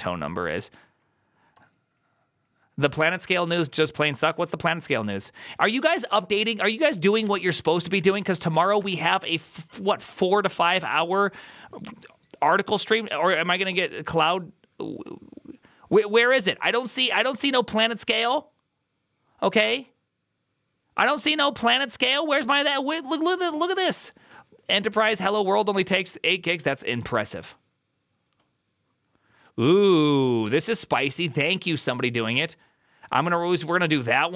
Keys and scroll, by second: 6.0 ctrl+t, 6.8-7.7 typing, 7.7 Down, 7.9 Down, 8.4 Down, 8.6 Return.